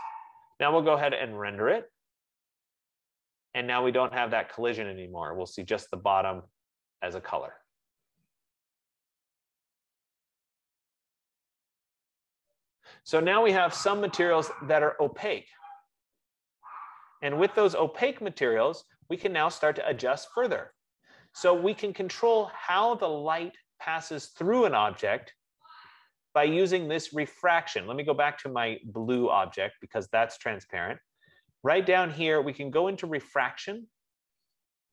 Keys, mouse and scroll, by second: 1.4 click, 16.8 F15, 21.2-26.0 drag, 29.4 click, 33.8 click.